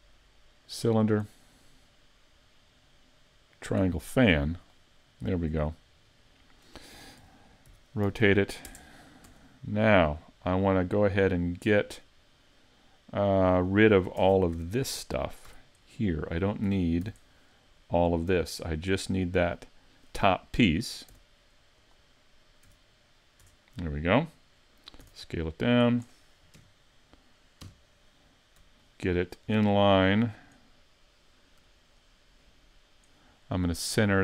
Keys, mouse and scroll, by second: 0.7 click, 3.5 click, 6.1 middle click, 7.2 r, 9.3 Tab, 10.1 scroll down 5, 10.6 middle click, 14.2 ctrl+Tab, 15.0 middle click, 15.5 z, 15.8 middle click, 16.7 a, 17.1 b, 21.1 x, 22.7 z, 23.4 Tab, 24.0 middle click, 24.6-25.0 scroll up 2, 25.0 s, 26.0 click, 26.6 KP_3, 27.7 KP_5, 28.8 shift+middle click, 29.5 scroll up 3, 29.9 shift+middle click.